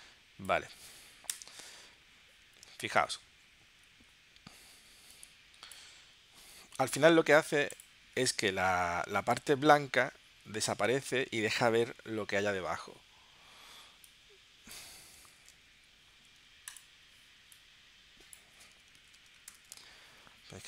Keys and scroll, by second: 1.3 Return, 7.1 super+z, 15.4 super+z, 19.1 super+z, 19.5 shift+super+p.